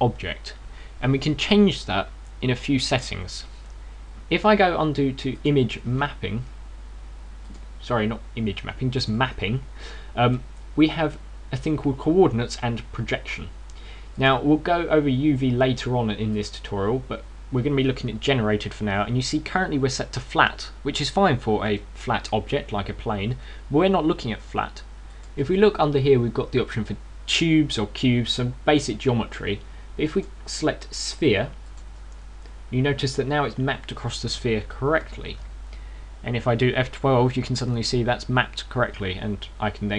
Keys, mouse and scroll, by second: 4.8 Escape, 6.2 click, 8.3 click, 9.8 click, 10.7-11.1 scroll down 3, 15.0 click, 17.2 click, 22.5 right click, 24.2 right click, 25.8 click, 32.4 click, 32.9 scroll up 2.